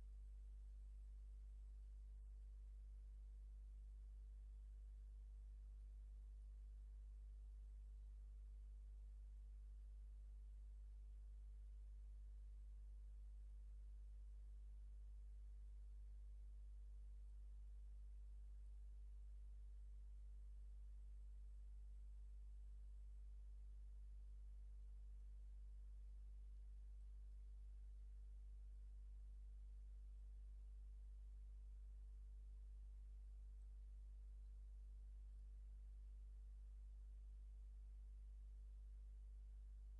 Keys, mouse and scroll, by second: 0.3 click, 1.1 click, 1.8 click, 3.2-6.0 drag, 6.4 click, 7.6 click, 9.4-11.9 drag, 12.6-13.8 drag, 14.1-17.5 drag, 18.3 click, 19.3-24.5 drag, 24.9 middle click, 25.6 ctrl+scroll up 2, 26.1 ctrl+middle click, 27.1 ctrl+middle click, 27.9-28.9 ctrl+drag, 30.2 click, 31.1-33.4 drag, 33.6-34.7 middle drag, 35.4 click, 36.8 ctrl+scroll down 2, 37.2-37.8 ctrl+scroll up 2.